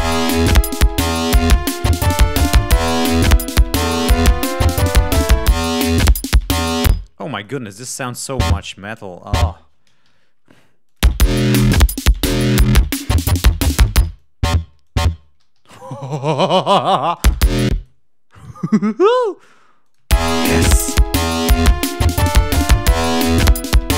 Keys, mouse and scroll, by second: 0.9 ctrl+click, 6.7 space, 7.2 click, 7.7 e, 8.2 click, 9.1 shift+click, 10.1 alt+shift+Down, 10.8 click, 10.9 space, 13.9 space, 14.1 click, 14.7 shift+click, 15.4 alt+shift+Down, 16.8 click, 17.1 space, 17.6 click, 18.3 g, 18.5 click, 19.1 alt+d, 19.7 click, 19.9 space, 21.6 click, 22.8 click, 23.8 click.